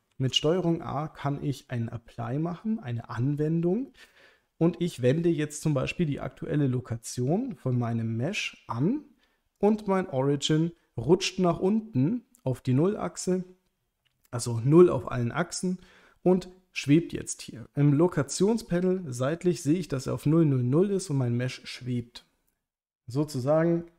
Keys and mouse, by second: 0.1 ctrl+a.